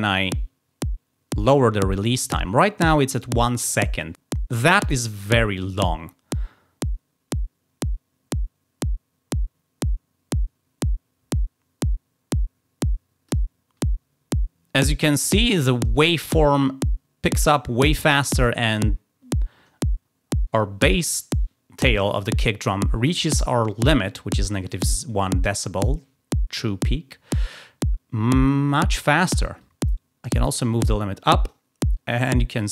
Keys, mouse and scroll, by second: 6.2-13.3 drag, 29.5-31.5 drag.